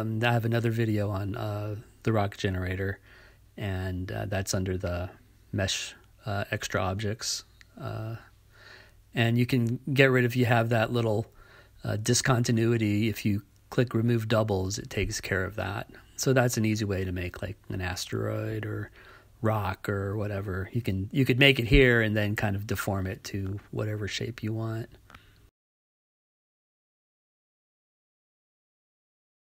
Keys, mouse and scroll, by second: 7.1 click, 22.2 click, 24.8 click, 28.1 click.